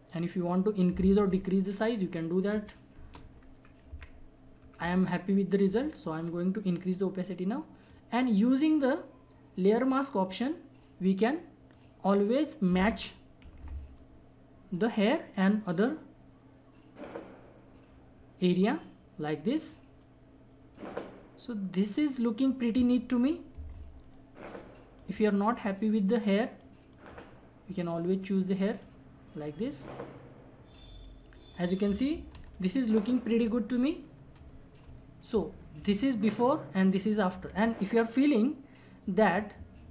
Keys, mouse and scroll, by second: 3.0 Return, 3.9 Up, 6.6-11.2 drag, 13.4 ], 13.5 ], 14.0-23.6 drag, 23.6 [, 23.7 [, 24.1-25.5 drag, 25.6-30.8 drag, 32.4 ctrl+=, 33.4 -, 34.3 ctrl+=, 36.0 alt+click, 36.0 alt+click.